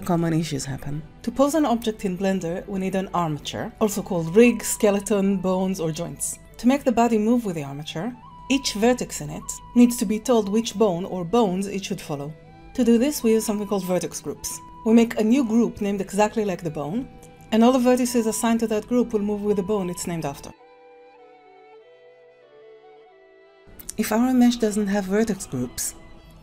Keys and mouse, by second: 8.3 Tab, 8.3 `, 14.6 Tab, 15.4 click, 16.6-18.8 drag, 18.8 Tab, 18.8 alt+a, 18.8 b, 20.6 click, 21.5 click, 22.1 Tab, 22.6 r.